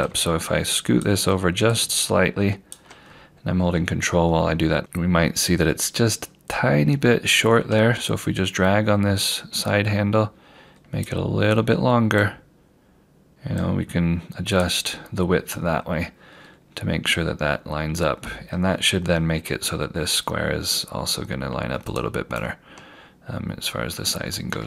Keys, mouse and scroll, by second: 0.1 click, 4.4 scroll down 1, 4.8-7.1 scroll up 1, 7.1-7.5 scroll down 1, 9.4 click, 12.9 click, 16.5-17.9 scroll down 1, 17.9 scroll up 1, 21.9 click.